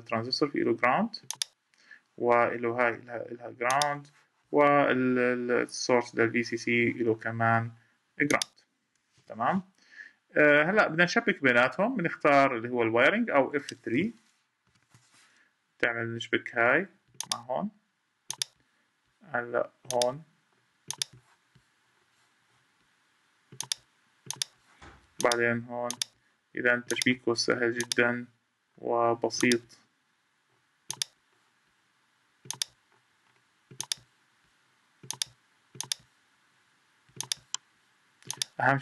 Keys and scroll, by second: 8.9 Escape, 14.4 F3.